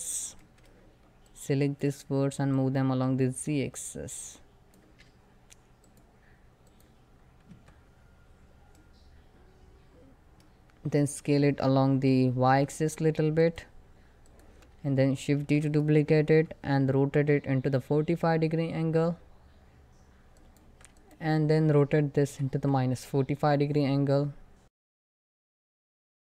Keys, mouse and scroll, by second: 0.2 shift+middle click, 0.5 scroll up 1, 0.9-5.5 drag, 6.8 scroll down 1, 7.1 Tab, 8.4-11.1 middle drag, 11.1 s, 12.3 y, 13.1 click.